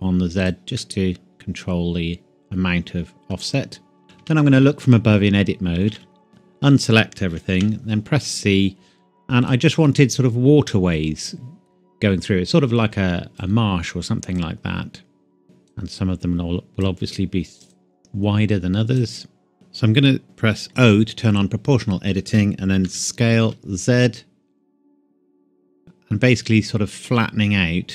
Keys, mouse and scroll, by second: 0.4 click, 0.8 middle click, 4.0 KP_7, 4.2 Tab, 5.9 a, 5.9 a, 6.5-7.5 scroll down 1, 7.5 c, 8.3-8.9 scroll up 1, 8.9-9.5 scroll down 1, 9.5 click, 19.5-20.2 scroll up 1, 20.7 o, 22.9 s, 23.5 z, 26.1 scroll down 1, 27.0-27.6 scroll down 1, 27.6-27.9 scroll up 1.